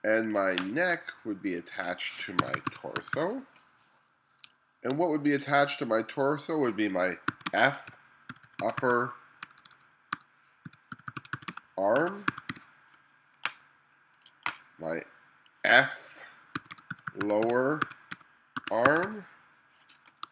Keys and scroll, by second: 2.2-4.5 typing, 7.3-13.1 typing, 16.4-20.3 typing.